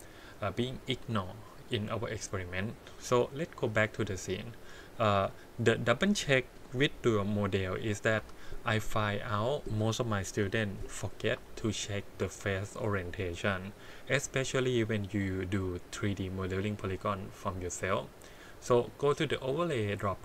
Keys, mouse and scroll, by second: 2.6-3.6 drag, 5.6 click, 7.2 click, 7.7 click, 8.2 h, 8.8 click, 10.3 KP_1, 11.7-12.1 shift+middle drag, 12.5-13.4 scroll down 1, 20.0-20.2 drag.